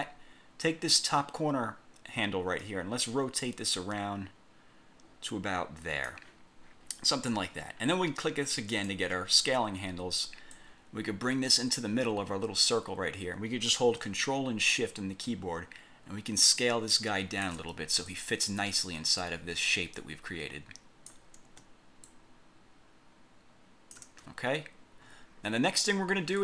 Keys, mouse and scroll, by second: 2.8-6.4 drag, 7.0 scroll up 1, 7.6 scroll down 2, 8.8 click, 10.6-12.0 drag, 12.2 scroll up 2, 15.4-17.8 ctrl+shift+drag, 18.2-21.4 drag, 22.2-24.2 ctrl+shift+drag, 25.2 scroll down 2, 26.0 scroll up 2.